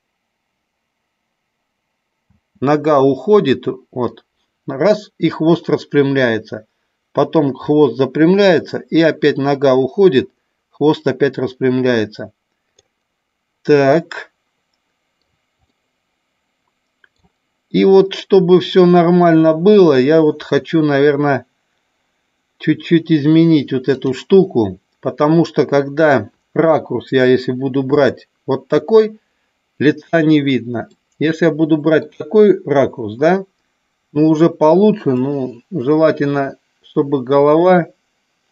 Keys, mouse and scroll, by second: 2.1 space, 4.1-12.9 drag, 14.0-15.1 middle drag, 15.6-17.3 middle drag, 19.6 click, 23.9 click, 27.7 KP_3, 30.9-32.0 middle drag, 35.2-38.5 drag.